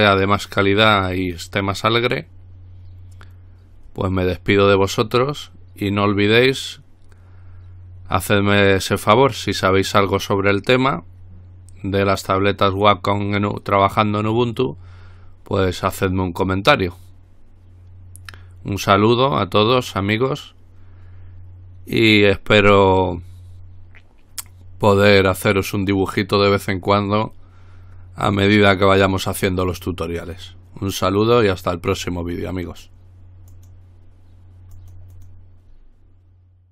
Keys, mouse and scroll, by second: 33.7 click, 35.0-36.0 drag.